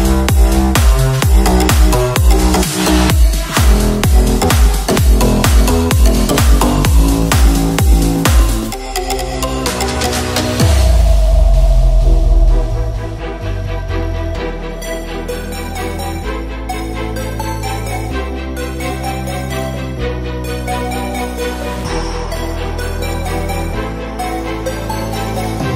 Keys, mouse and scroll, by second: 7.7 click.